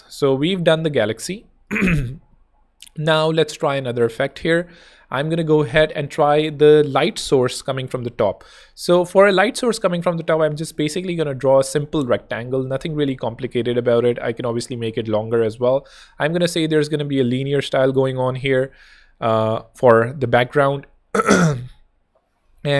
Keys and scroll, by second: 4.4 BackSpace, 5.1 z, 7.7 r.